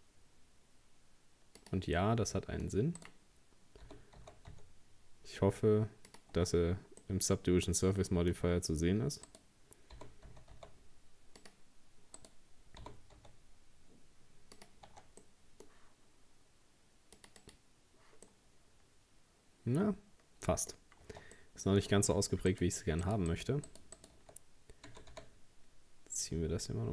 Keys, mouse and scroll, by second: 2.0-3.0 middle drag, 3.0 right click, 3.9 g, 6.4 Tab, 7.0-8.4 middle drag, 8.4 Tab, 9.3 right click, 10.0 g, 12.2 right click, 12.8 g, 14.9 Tab, 15.2-17.2 middle drag, 17.2-18.3 drag, 18.3-20.8 middle drag, 20.8 scroll up 1, 21.1 Tab, 21.4-22.5 middle drag, 22.5 right click, 23.0 shift+right click, 23.3 shift+right click, 23.7 shift+right click, 24.0 shift+right click, 24.9 g.